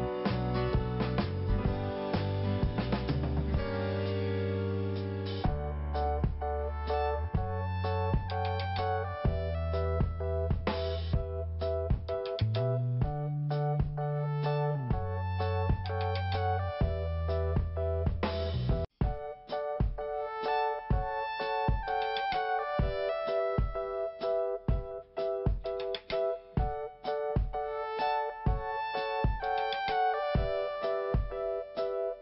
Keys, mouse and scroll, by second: 0.0 scroll down 1, 0.5 scroll up 1, 2.2 click, 3.7 click, 8.7 p, 9.9 click, 11.8 click, 13.2 n, 14.0 scroll up 2, 14.5 click, 14.6 click, 16.1 click, 17.8 p, 18.6 scroll down 1, 19.6 click, 21.5 click, 21.6 click, 22.9 click, 23.0 click, 26.2 n, 27.9 p, 28.7 click, 30.0 scroll down 1, 31.7 click.